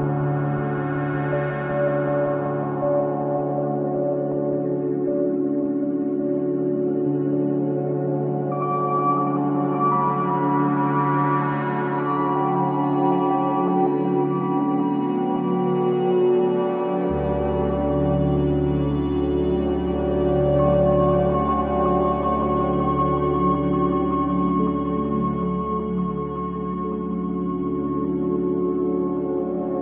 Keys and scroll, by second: 3.7 ctrl+z, 8.3 ctrl+g, 12.1 Escape, 14.7 space, 16.9 c, 17.2 Escape, 20.0 b, 20.4 Escape, 22.4 F3, 22.7 F2, 28.8 b, 29.4 Escape.